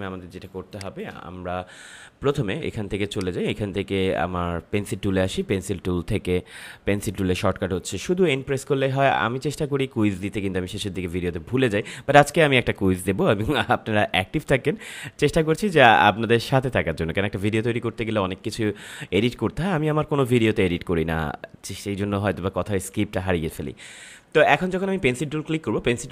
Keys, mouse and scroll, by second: 0.0 space, 0.7 click, 0.8 space, 3.1-15.9 drag.